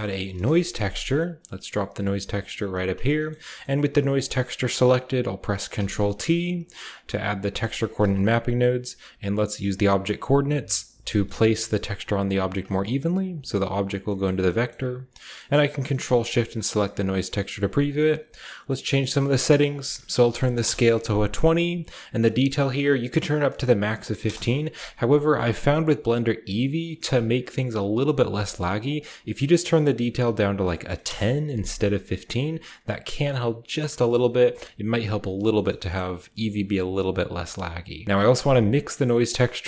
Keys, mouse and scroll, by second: 0.0-0.6 typing, 1.6-2.8 scroll down 1, 1.7-2.8 middle drag, 2.1-5.5 drag, 5.5 ctrl+t, 6.0 ctrl+middle click, 6.1-9.6 ctrl+scroll up 2, 6.2 a, 6.7-11.7 ctrl+drag, 7.4 g, 7.8 a, 9.6-11.4 scroll up 1, 11.7 typing, 12.2 click, 13.3-14.7 drag, 13.7-16.1 scroll down 1, 14.7-16.1 middle drag, 16.2-17.8 ctrl+shift+drag, 17.2-19.4 ctrl+shift+scroll up 1, 19.4-23.8 drag, 19.4-19.8 scroll up 1, 20.1-20.9 typing, 22.0 typing, 23.5-25.4 typing, 26.4-28.4 middle drag, 28.8-30.2 drag, 30.0 typing, 30.9 Return, 31.9 middle drag, 32.1-33.3 scroll up 1, 32.1 middle click, 33.3-35.1 middle drag, 33.3-35.1 scroll down 1, 35.1-38.0 drag, 35.4-37.5 scroll down 1, 38.0 ctrl+x, 38.0-38.8 shift+scroll down 1, 38.8 shift+scroll up 1.